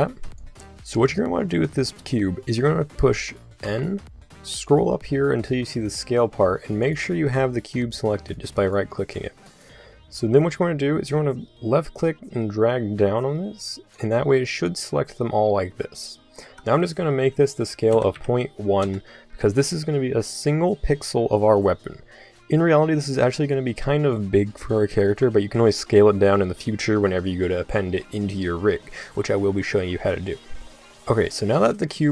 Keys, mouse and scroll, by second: 0.7-3.6 middle drag, 3.6 n, 6.7 click, 8.4 right click, 20.1-23.0 middle drag, 23.6 middle click.